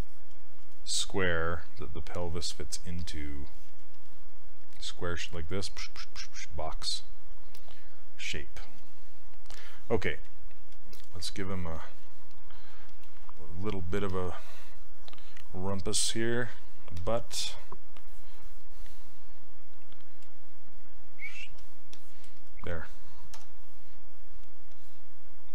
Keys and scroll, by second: 23.4 w.